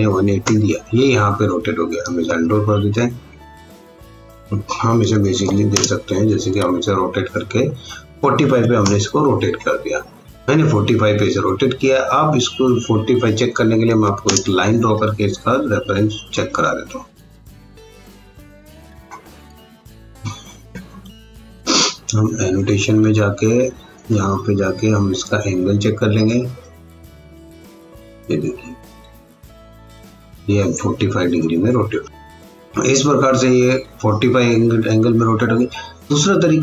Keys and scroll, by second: 0.0-0.5 typing, 2.3 ctrl+z, 5.0 r, 5.4 o, 5.7 space, 8.4 KP_4, 8.6 KP_5, 8.8 Return, 13.9 l, 14.2 space, 18.0 F8, 20.7 Escape, 32.7 Escape.